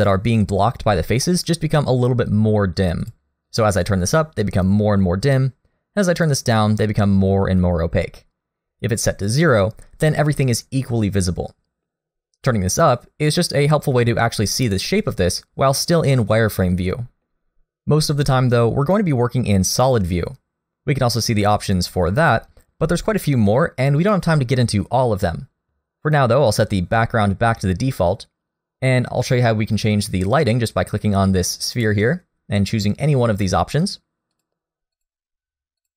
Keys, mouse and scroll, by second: 1.0 scroll down 1, 1.3 middle click, 3.0 click, 15.8-16.1 scroll down 2, 16.1 middle click, 19.8 click, 21.8 click.